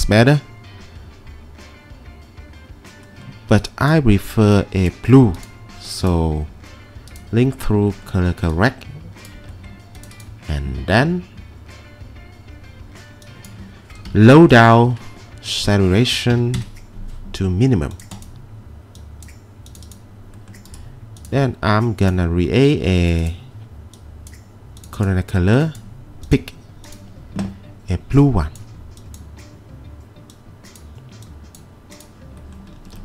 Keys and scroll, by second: 14.1 -, 16.3 typing, 16.6 Return.